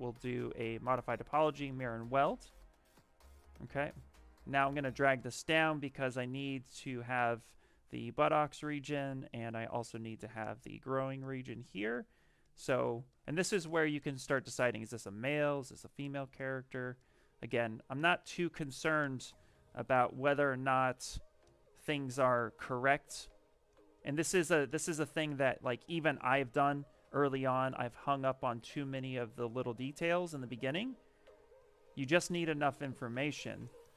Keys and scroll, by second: 8.0 s, 21.5-22.9 typing.